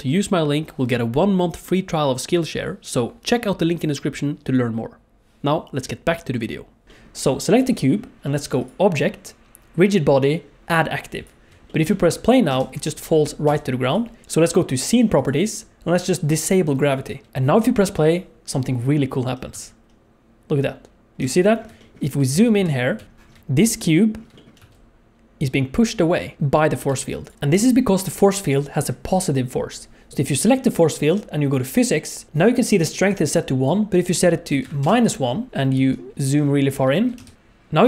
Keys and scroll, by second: 12.5 space, 13.4 space, 17.3 space, 19.5 space, 21.2 space, 22.3 KP_1, 22.4 KP_1, 22.4 KP_3, 24.6 space, 27.3 space, 35.7 KP_1, 37.1 space, 37.3 space.